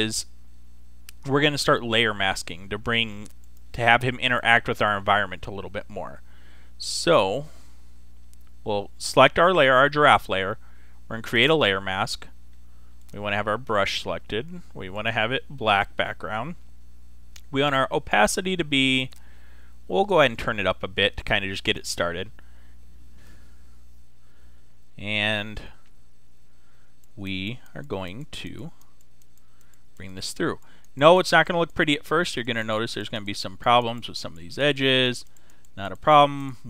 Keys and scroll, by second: 23.3 ], 25.1 ], 26.1 [.